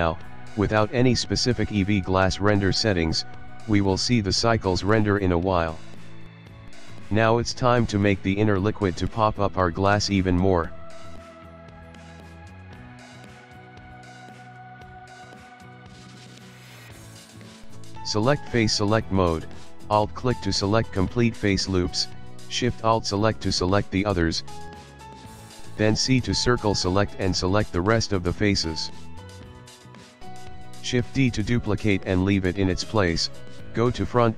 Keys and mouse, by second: 0.3 middle click, 0.6 middle click, 6.6 click, 6.7 middle click, 7.7 click, 7.9 Tab, 8.1 middle click, 8.3 middle click, 8.4 Tab, 8.9 click, 9.5 click, 11.0 click, 11.5 click, 11.9 middle click, 12.2 middle click, 12.9 Tab, 13.4 middle click, 13.5 middle click, 14.7 click, 15.8 click, 16.4 shift+middle click, 16.8 middle click, 17.2 shift+middle click, 17.7 ctrl+middle click, 19.2 click, 20.0 alt+click, 20.5 middle click, 21.5 alt+shift+click, 21.9 middle click, 22.9 c, 27.9 middle click, 28.6 middle click, 28.7 middle click, 29.2 ctrl+middle click, 29.5 ctrl+middle click, 29.7 shift+middle click, 29.8 shift+middle click, 30.7 shift+d, 33.6 KP_1.